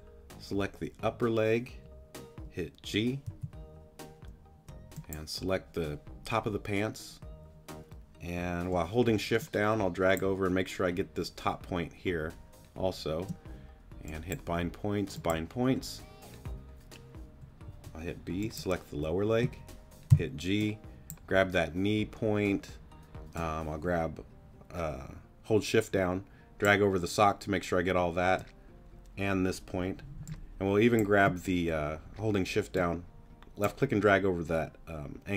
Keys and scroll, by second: 3.3 g, 4.3 shift+g, 17.6 b, 20.1 g, 30.2 space.